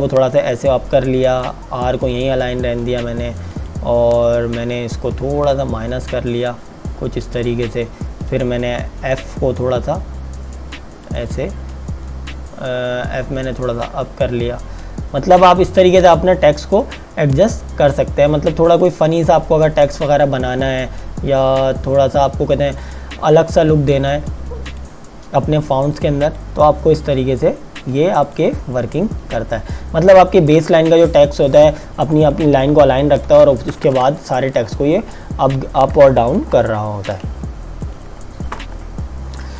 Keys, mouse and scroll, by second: 0.4 click, 7.2 click, 15.8 click, 22.7 click, 32.1 click, 33.7 KP_Enter, 34.7 Tab, 36.2 KP_Subtract, 37.9 click, 38.1 Delete, 38.7 Tab, 39.4 space.